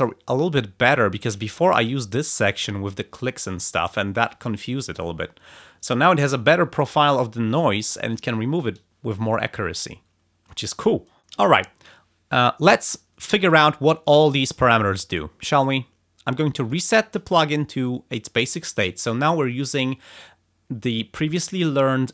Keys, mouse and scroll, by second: 1.6 ctrl+scroll up 2, 16.6 click.